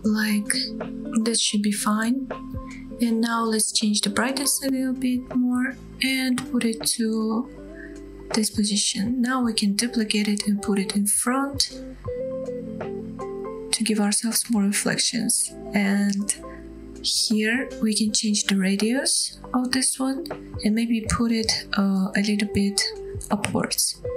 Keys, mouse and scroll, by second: 2.6-3.7 drag, 3.5 KP_0, 5.6 g, 8.7 click, 8.9-9.2 scroll down 2, 9.3 shift+middle click, 9.7 shift+d, 16.3 click, 16.9-17.3 scroll down 1, 17.3-18.1 scroll up 1, 19.0-19.6 middle drag, 19.9-23.0 drag, 23.3 scroll up 1, 23.5 middle click, 23.9 middle drag.